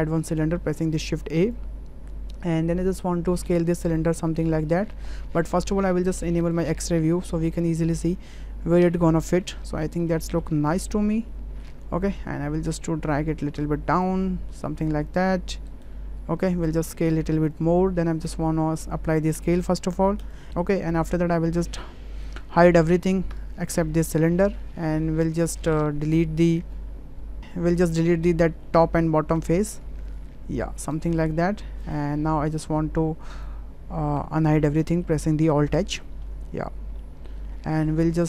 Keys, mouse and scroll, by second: 3.3 s, 7.3 s, 10.3 shift+middle click, 10.8-11.7 ctrl+middle drag, 12.1 w, 12.8 click, 14.0 click, 16.4 s, 19.3 ctrl+a, 23.3 shift+h, 25.3 drag, 25.9 Tab, 26.2 click, 27.4 middle click, 27.4 3, 27.8 middle click, 28.7 middle drag, 30.3 Delete, 31.3 `, 32.7 `, 34.2 Tab, 34.5-35.0 shift+middle drag, 35.7 alt+h, 37.0 shift+middle click, 37.7 shift+middle click.